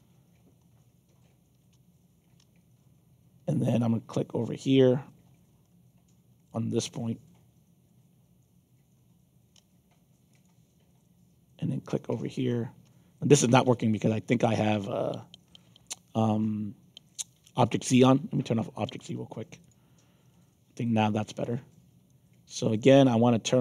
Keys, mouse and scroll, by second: 5.6 middle click, 10.3 shift+click, 15.4 ctrl+z, 18.9 click, 19.6 click, 20.2 middle click, 22.0-23.6 alt+drag.